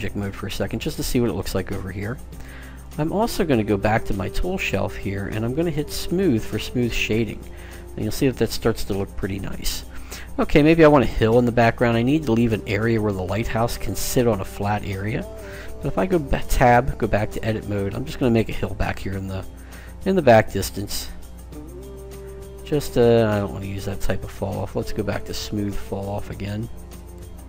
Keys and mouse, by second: 3.2-5.1 drag, 6.0 click, 7.3 middle click, 8.0 click, 8.2 middle click, 9.4-11.7 middle drag, 16.4 Tab, 18.7-20.3 drag, 25.2-26.9 drag.